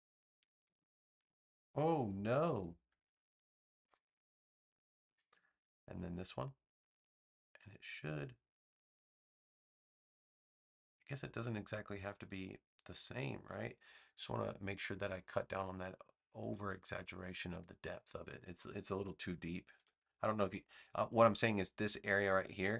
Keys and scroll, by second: 2.2 super+z, 19.7 v.